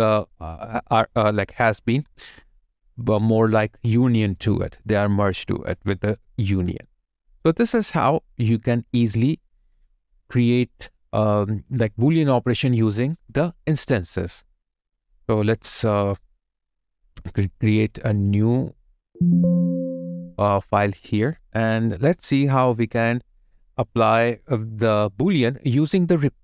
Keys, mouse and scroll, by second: 0.5 alt+click, 0.7 alt+right click, 1.6 alt+middle click, 4.1 alt+right click, 4.8 alt+click, 5.2 alt+middle click, 5.5 alt+scroll up 1, 5.9 alt+click, 6.8 alt+right click, 7.2 alt+click, 9.1 alt+right click, 9.8 alt+click, 11.0 alt+middle click, 11.7 alt+click, 12.4 alt+right click, 13.2 alt+click.